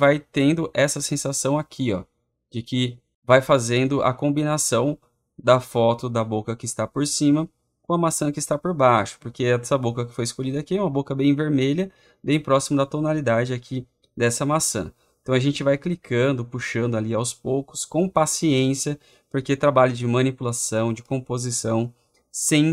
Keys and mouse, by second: 19.9 click.